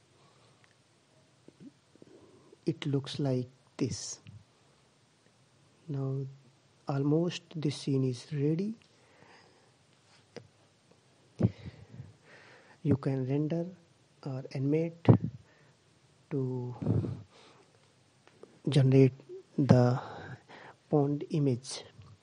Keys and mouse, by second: 13.6 s, 21.4 middle click.